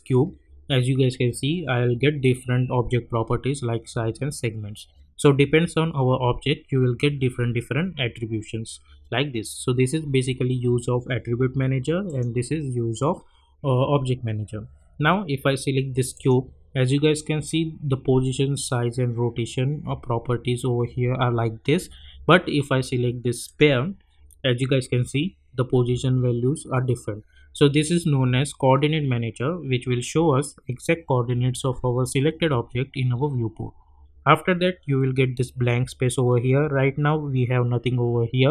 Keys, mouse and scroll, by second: 12.0 click, 16.1 click, 23.4 click.